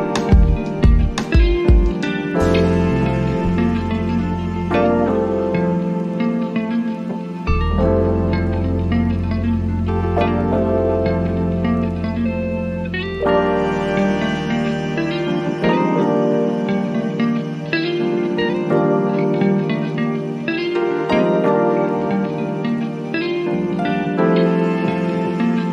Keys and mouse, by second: 1.2-6.0 drag, 8.2-16.0 drag, 16.0 ctrl+z, 17.6 click, 22.0-23.7 drag, 23.7 right click.